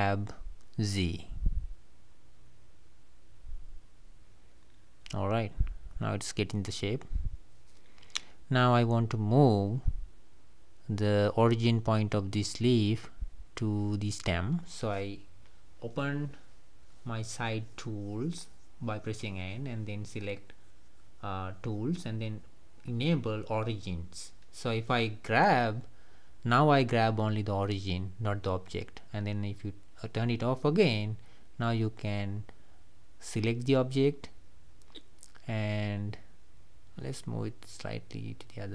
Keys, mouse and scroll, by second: 0.2-1.8 middle drag, 1.8 g, 5.6 click, 6.0-7.7 middle drag, 7.7 Tab, 7.9-8.9 scroll up 1, 8.9-9.3 scroll up 1, 9.3 click, 9.9 click, 10.6 click, 16.1 n, 18.0 click, 22.1 click, 26.1 g, 30.1 drag, 30.6-31.4 middle drag, 31.4 click, 32.0 click, 33.1-35.8 middle drag, 35.8 KP_7, 37.6-38.7 drag.